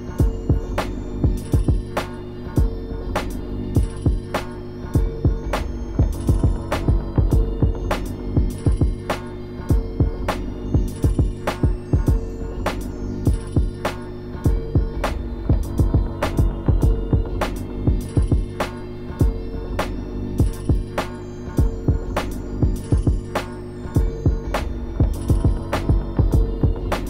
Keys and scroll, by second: 0.0 scroll down 1, 0.3 scroll up 1, 0.5 scroll down 1, 0.8 scroll up 1, 2.5 scroll up 1, 3.1 scroll up 1, 3.3 scroll down 1, 3.5 ctrl+z, 5.7 scroll down 1, 6.3-6.8 scroll up 2, 7.8 scroll up 1, 9.1 ctrl+z, 9.4-9.8 scroll down 2, 11.4 scroll down 1, 12.9-13.5 scroll up 2, 13.5 scroll down 1, 20.8 ctrl++, 24.1 ctrl++, 24.2 scroll up 1.